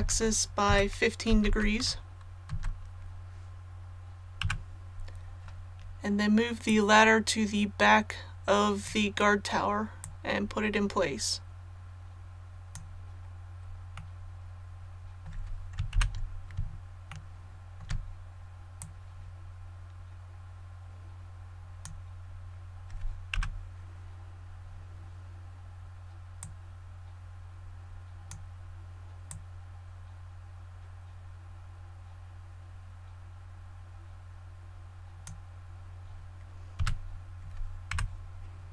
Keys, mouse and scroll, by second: 0.0-1.4 typing, 4.4 KP_3, 6.6-13.6 drag, 13.9 middle click, 15.2-15.7 scroll down 1, 15.9 KP_1, 17.0 shift+middle click, 18.7-22.6 drag, 23.3 KP_3, 26.4-35.6 drag, 36.7 a, 37.9 KP_1.